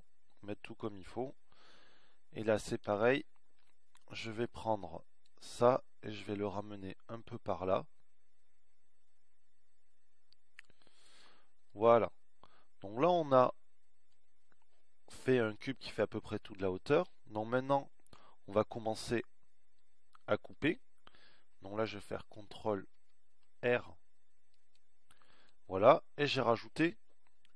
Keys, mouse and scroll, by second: 3.7 a, 4.5 b, 24.1 ctrl+r.